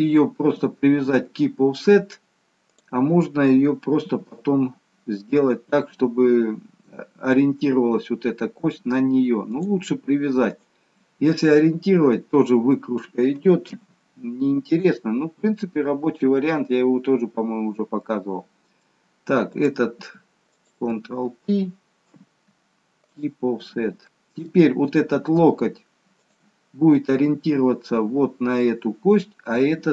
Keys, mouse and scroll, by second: 2.8 click, 4.0 g, 9.4 click, 10.4 shift+click, 15.6 ctrl+p, 15.6-16.1 scroll down 1, 16.1 middle click, 19.5 click, 20.6 shift+click, 22.1 ctrl+p, 24.1 middle click, 24.1-25.1 scroll down 1.